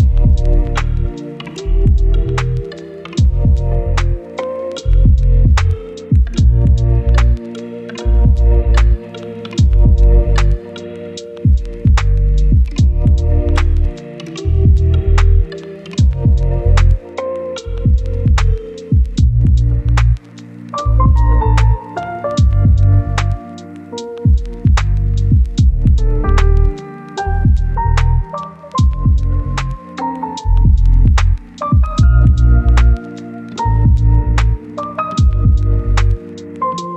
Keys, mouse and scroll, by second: 3.1 scroll up 1, 3.4 click, 4.0 right click, 4.6 scroll down 1, 4.9-6.4 scroll up 1, 6.4 scroll down 1, 6.5-7.0 scroll up 1, 7.0 scroll down 1, 7.1-7.7 scroll up 1, 7.7 right click, 8.7 click, 9.0 scroll down 1, 9.2-10.9 scroll up 1, 10.9 click, 11.9 right click, 12.7 scroll down 1, 12.8-13.3 scroll up 1, 13.3 click, 13.6 right click, 13.9-14.5 scroll down 2, 14.2 right click, 14.5 scroll up 1, 14.7 right click, 14.8 scroll down 1, 14.9 scroll up 1, 15.1 right click, 15.3 scroll down 1, 15.4 scroll up 1, 15.6 right click, 15.9 scroll down 1, 16.0 scroll up 1, 16.7 click, 16.9-17.4 scroll down 2, 17.0 right click, 17.4 scroll up 1, 17.5 right click, 18.3-19.7 scroll up 1, 19.7 scroll down 1, 19.8-21.2 scroll up 1, 21.2 scroll down 1, 21.4-23.4 scroll up 1, 24.5 click, 25.3 scroll down 1, 25.5 scroll up 1, 25.7 right click, 25.9 scroll down 1, 26.0-27.4 scroll up 1, 27.4 click, 27.9 scroll down 1, 28.1 right click, 28.5 scroll down 1, 28.7-30.7 scroll up 1, 30.7 click, 30.9-31.3 scroll down 1, 31.3-31.7 scroll up 1, 31.8 scroll down 1, 31.9-32.2 scroll up 1, 34.5 click, 34.7 scroll down 1, 34.8 right click, 35.4 scroll down 1, 35.5-36.3 scroll up 1, 36.3-36.9 drag.